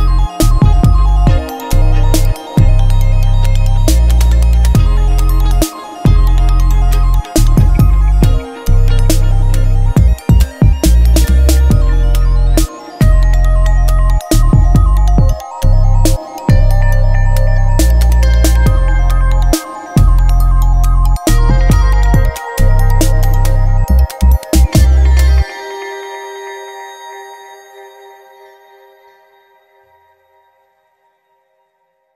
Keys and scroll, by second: 0.0-2.2 typing, 4.4-8.9 typing, 10.1 ctrl+Return, 10.9 v, 11.0 Up, 12.8-13.8 typing, 18.5 v, 18.6 Down, 19.1 Up, 24.4 Return, 30.7 Return, 31.5 t.